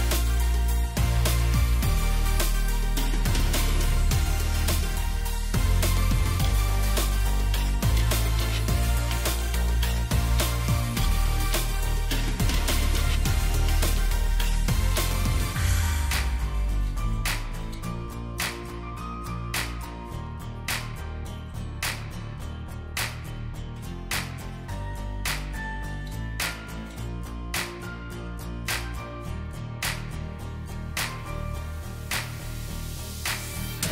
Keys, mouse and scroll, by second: 5.7 shift+click, 9.0-9.6 alt+scroll up 1, 21.4 alt+scroll up 1, 22.5 alt+click, 23.2-23.7 alt+scroll down 2, 23.7 alt+scroll up 1, 25.0 alt+click, 26.1-26.5 alt+scroll down 1, 26.7 space, 27.8 alt+scroll down 1, 29.5 alt+scroll down 1.